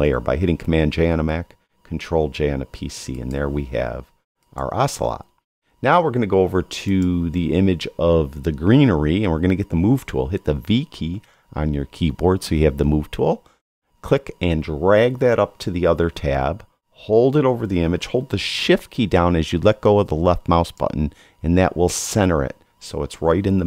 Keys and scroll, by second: 1.0 super+j, 10.5 v.